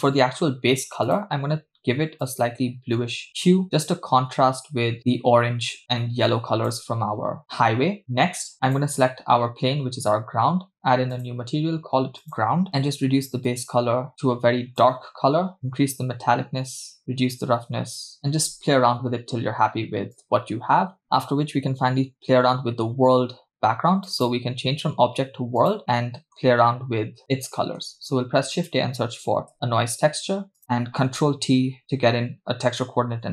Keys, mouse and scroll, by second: 0.0 middle click, 1.1 click, 8.6 click, 11.1-11.6 drag, 12.2 click, 15.6-18.2 drag, 20.1-21.0 drag, 24.1-25.7 drag, 25.8 scroll down 2, 25.9 middle click, 26.6-27.8 scroll up 2, 27.8 scroll up 1, 28.0 shift+a, 32.0 ctrl+t.